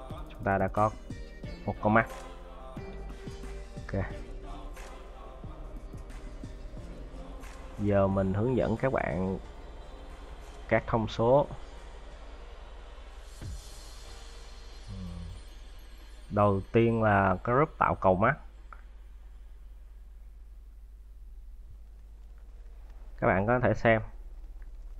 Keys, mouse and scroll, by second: 3.2-3.6 scroll up 3, 4.2-4.7 scroll down 3, 4.7 middle click, 6.0 middle click, 7.1-7.9 scroll up 4.